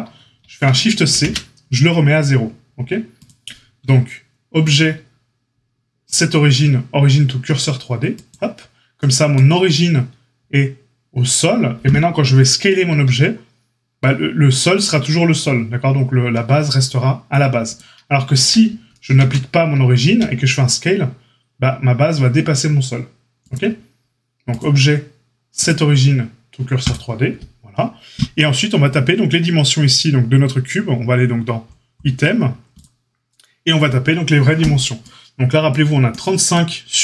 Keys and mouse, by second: 1.1 shift+c, 3.2-32.8 drag, 12.8 s, 19.1 ctrl+z, 20.0 s, 32.8-37.0 middle drag.